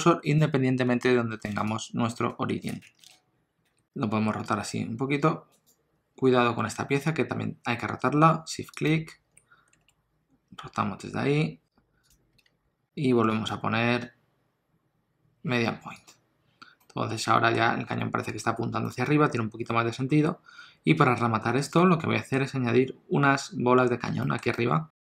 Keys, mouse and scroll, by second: 3.6 r, 3.8 KP_3, 4.2 r, 8.7 shift+click, 9.7 r, 12.4 alt+a, 13.3 click, 16.8 middle click, 18.9 middle click, 21.7 ctrl+middle click, 24.2 shift+middle click, 24.5 middle click.